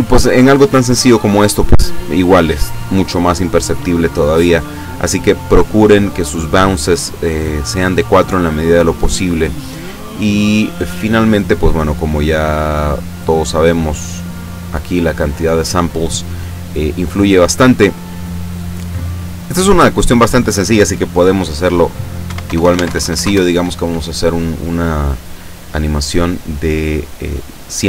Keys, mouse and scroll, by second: 9.1-9.6 scroll down 2, 9.7 scroll down 2, 13.2 click, 13.7 click, 14.7 click, 22.2 KP_1, 22.4 KP_0, 22.8 Tab, 22.9 KP_1, 23.0 KP_0, 23.2 KP_Enter.